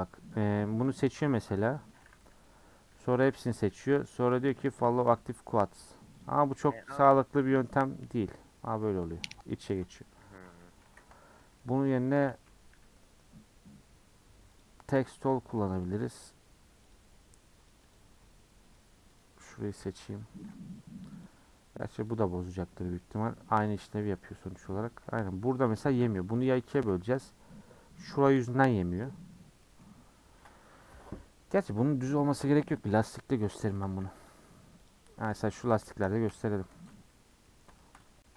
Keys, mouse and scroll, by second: 0.4 click, 3.2 l, 4.8-6.2 right drag, 6.2 click, 10.5 ctrl+z, 10.8 ctrl+z, 12.7 n, 14.6 click, 17.0-19.2 drag, 20.0 l, 21.4-22.1 drag, 26.0 ctrl+z, 26.4 ctrl+z, 32.9 /, 33.5 Tab, 33.9 h, 34.3 click, 34.9 click, 35.4-36.3 shift+middle drag, 36.3 /, 36.7 Tab, 36.9 middle click, 37.5 scroll up 3, 37.8 shift+middle click.